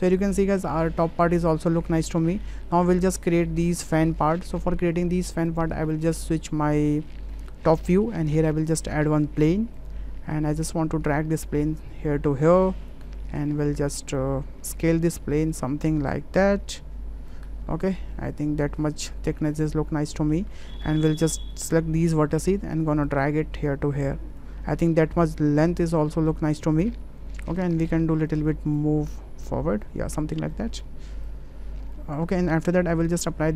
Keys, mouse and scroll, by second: 0.3 middle click, 1.1 middle click, 2.4 shift+middle click, 3.4 shift+middle click, 6.2 shift+middle click, 6.8 shift+middle drag, 7.3 shift+middle click, 7.8 shift+middle drag, 8.3 shift+a, 11.5-12.9 drag, 13.1 shift+middle click, 14.0 click, 15.0-17.3 drag, 17.7 shift+middle click, 18.7-19.7 drag, 20.1 shift+middle click, 20.5 Tab, 21.0 shift+middle click, 21.7 click, 22.4 shift+middle click, 23.1-24.4 drag, 24.7 shift+middle click, 27.2 Tab, 28.2 w, 28.9 click, 30.1 Tab, 30.5 drag, 31.3 click, 31.9 ctrl+a, 33.2 ctrl+a.